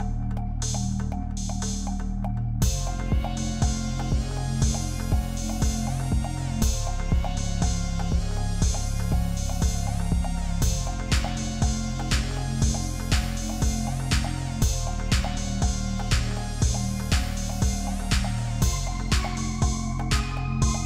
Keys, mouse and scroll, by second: 15.8 double click.